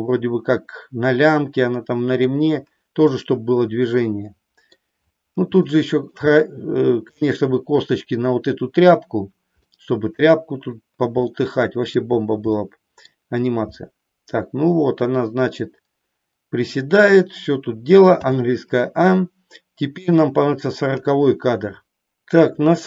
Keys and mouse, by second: 3.2-4.8 middle drag, 5.7 shift+middle click, 6.4 middle click, 9.7 middle click, 11.3 middle click, 12.6 middle click, 13.8-16.8 middle drag, 18.2 a, 20.0 click.